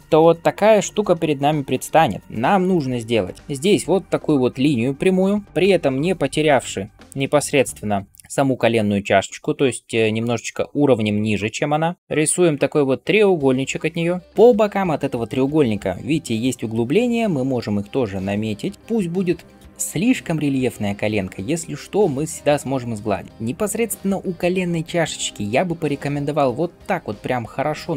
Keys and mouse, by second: 5.4 f, 22.0-23.6 ctrl+drag, 22.0-23.6 ctrl+middle drag, 22.0-23.6 ctrl+right drag.